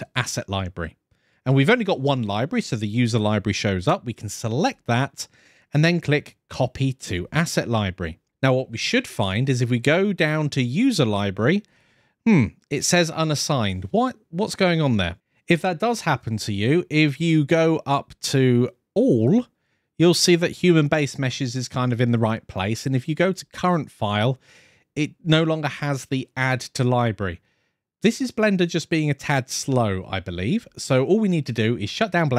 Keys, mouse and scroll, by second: 9.7-10.8 drag, 11.5 click, 18.0-20.1 drag, 22.5-23.2 drag.